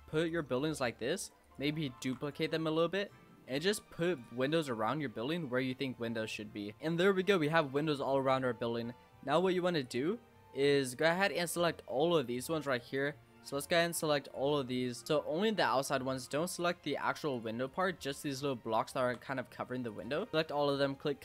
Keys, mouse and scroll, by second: 0.6 g, 2.0 shift+d, 2.8 click, 4.5-5.0 middle drag, 5.0-5.3 scroll up 2, 5.3 l, 6.7 middle click, 7.3-9.8 shift+middle drag, 9.8 click, 10.7 Tab, 11.0 click, 12.2 shift+click, 12.7 shift+click, 12.9 shift+click, 13.9 shift+click, 14.3 shift+drag, 14.7 shift+click, 15.5-16.6 middle drag, 16.6 shift+click, 16.9 shift+click, 17.4 shift+click, 17.7 shift+click, 18.1 shift+click, 18.4 shift+click, 18.9 shift+click, 19.2-19.9 middle drag, 19.9 shift+click, 20.3-21.2 middle drag.